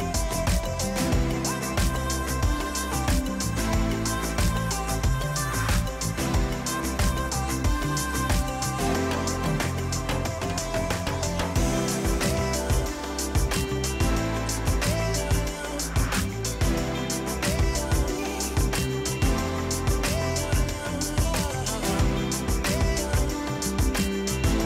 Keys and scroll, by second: 6.1 r, 10.2 f, 11.5-12.4 typing, 14.1 ctrl+c, 15.1 Delete, 16.8 p, 19.1 ,, 20.1-22.4 typing, 20.3 Return, 21.8 Return.